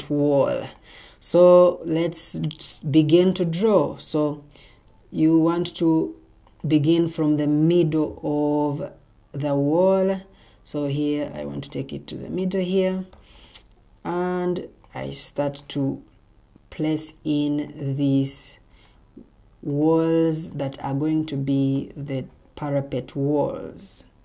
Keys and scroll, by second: 2.9 Escape, 4.9 Escape.